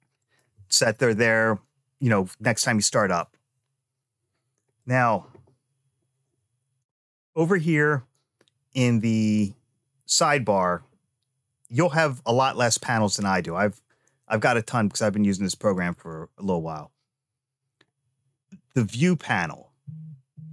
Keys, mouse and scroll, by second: 0.0 click, 4.6 click, 15.5 click.